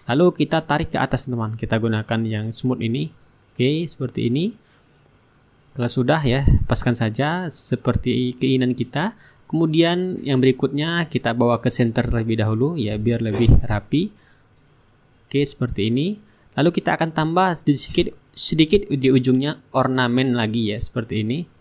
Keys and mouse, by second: 0.9 click, 2.1-7.5 ctrl+drag, 7.8 click, 9.5 shift+click, 11.7-14.3 drag, 14.8 middle click, 15.1 click, 15.7-16.7 middle drag, 17.1 click, 18.8 click, 20.6 click, 21.4 click.